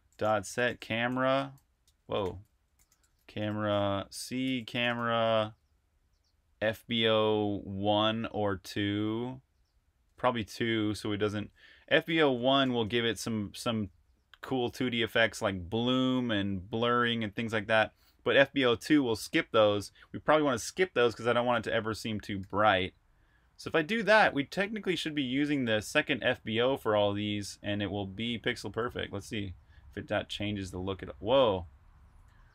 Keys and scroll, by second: 0.0-5.2 typing, 6.5 Tab, 9.8 Tab, 11.6-12.9 typing, 21.4-23.4 typing, 22.2 super+r, 28.5-29.4 typing, 31.0-32.5 typing.